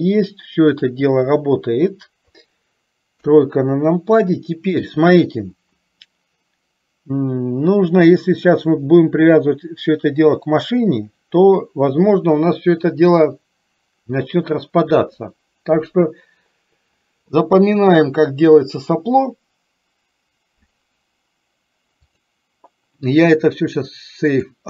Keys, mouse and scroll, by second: 0.8 click, 3.2 KP_3, 22.1-24.6 drag.